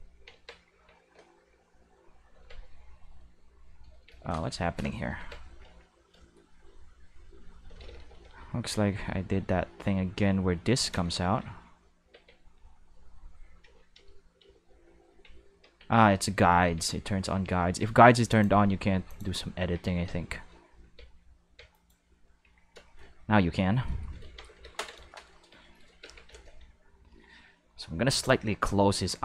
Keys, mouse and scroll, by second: 0.2 Tab, 0.7 q, 1.8 q, 2.3 Tab, 4.0 Tab, 5.1 Tab, 5.6 a, 6.8 q, 7.8 ctrl+z, 7.9 ctrl+z, 8.1 ctrl+z, 8.3 ctrl+z, 10.9 ctrl+z, 12.1 Tab, 13.6 ctrl+z, 13.9 ctrl+z, 14.4 ctrl+z, 15.6 Tab, 16.6 Tab, 17.2 Tab, 17.7 Tab, 18.3 click, 19.0 click, 19.5 Tab, 20.0 q, 20.8 Tab, 21.4 Tab, 21.7 right click, 22.4 a, 23.9-25.1 shift+middle drag, 24.3 ctrl+s, 24.5 ctrl+s, 24.6 ctrl+s, 26.0 alt+a, 26.2 c, 28.2-29.2 drag.